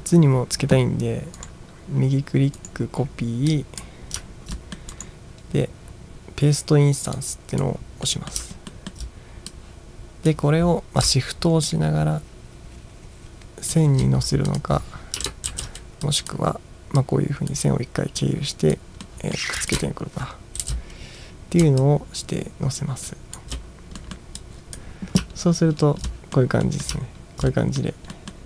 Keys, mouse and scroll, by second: 1.5 right click, 2.6 right click, 3.6 click, 4.3 ctrl+scroll up 2, 4.6 middle drag, 5.0 right click, 7.2 click, 8.1 middle drag, 8.8 ctrl+middle click, 9.5 click, 11.7-13.7 shift+drag, 14.5 click, 15.5 ctrl+shift+v, 16.1 drag, 17.0-17.5 drag, 18.2-18.7 drag, 19.1 middle drag, 19.6 click, 20.7 ctrl+shift+v, 21.8-23.4 shift+drag, 24.1 middle click, 24.4 click, 25.4-26.1 ctrl+scroll down 5, 26.1-26.4 middle drag, 26.7 middle drag, 27.1 ctrl+scroll down 1, 27.5 middle drag, 28.1 middle click.